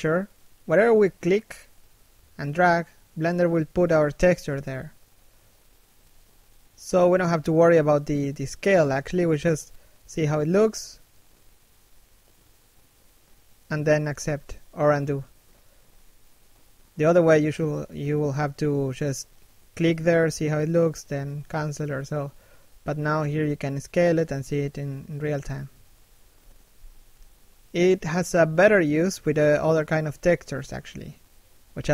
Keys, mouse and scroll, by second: 0.4 middle click, 4.0 click, 5.0 middle click, 7.0 click, 8.5 click, 9.4 middle click, 10.3 click, 11.0 middle click, 11.7 click, 12.5 shift+middle click, 13.1 click, 14.2 click, 15.3 click, 16.2 shift+middle click, 16.5 middle click, 16.9-17.6 scroll up 1, 17.8 click, 18.9 click, 20.0 click, 21.0 middle click, 21.2 shift+middle click, 21.5-22.0 scroll up 1, 22.0 click, 23.1 click, 25.0 scroll down 1, 25.3 middle click, 26.5 shift+middle click, 26.9 middle click, 28.4 shift+middle click, 28.8 scroll up 1, 29.4 click, 31.4 middle click, 31.8 shift+middle click.